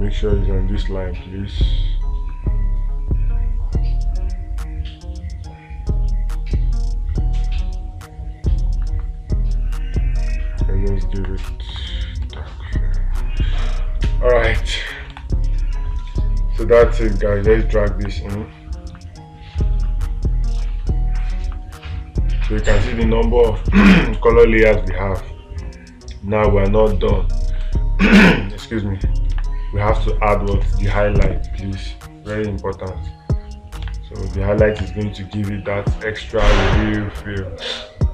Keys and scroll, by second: 12.7 space, 25.3 space, 27.1 space, 29.8 space.